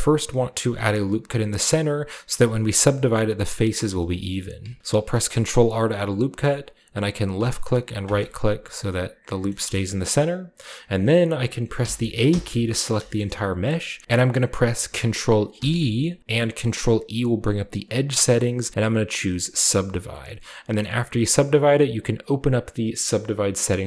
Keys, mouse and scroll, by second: 4.8 ctrl+r, 7.3-8.8 drag, 8.0-11.8 middle drag, 11.8 a, 12.2 a, 13.0-14.0 shift+middle drag, 13.7-14.0 scroll down 1, 13.9 typing, 14.0 ctrl+e, 14.3-16.0 middle drag, 15.5 ctrl+e, 19.7 click, 22.2 click.